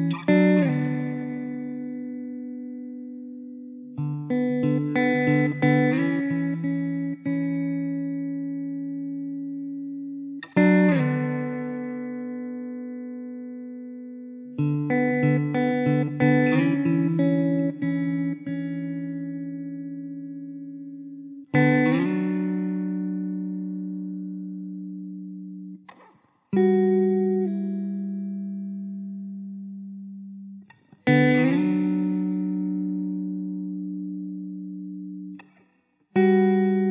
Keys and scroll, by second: 1.5 s, 3.4 s, 4.5 s, 5.9 ctrl+z, 6.0 ctrl+z, 8.3 s, 10.3 s, 12.9 shift+d, 15.6 shift+d, 16.5 Tab, 17.4 Tab, 21.1 s, 25.6 shift+d, 28.8 KP_0, 30.6 s, 34.0 KP_0, 34.9 Delete.